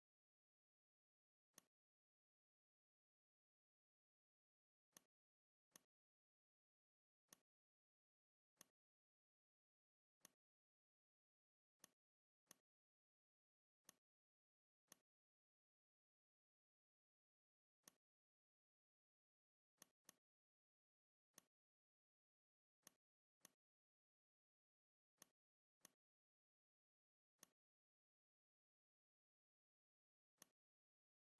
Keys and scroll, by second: 0.4 i, 2.8 n, 4.4 z, 5.4 space, 6.5 v, 11.3 z, 12.2 space, 13.4 v, 15.5 Delete, 17.3 z, 19.0 v.